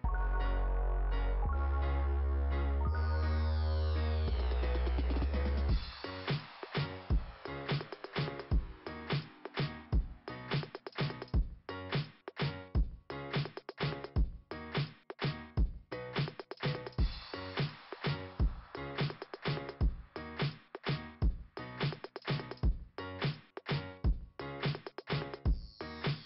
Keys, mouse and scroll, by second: 0.9 click, 1.2 click, 3.1 click, 5.9 click, 7.8 click, 9.7 click, 10.8 click, 12.7 click, 15.5 scroll down 2, 17.4 click, 18.5 click, 20.4 click, 21.1 click, 21.7 click, 21.8 click, 22.0 click, 22.7 click, 24.0 click, 25.9 click.